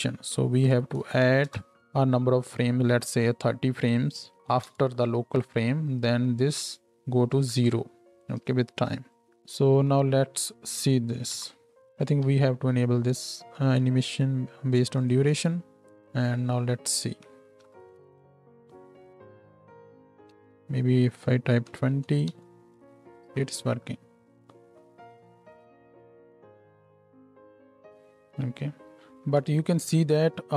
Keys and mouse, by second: 1.0 d, 4.0-9.3 right drag, 11.3 shift+Left, 12.2 Tab, 12.2-15.0 middle drag, 15.0 click, 15.1-21.2 middle drag, 15.9 Tab, 17.5 shift+Right, 17.6 shift+Left, 18.0 space, 20.4 space, 21.2-30.5 drag, 22.8 shift+Left, 23.2 space, 29.0 space, 29.7 shift+Left.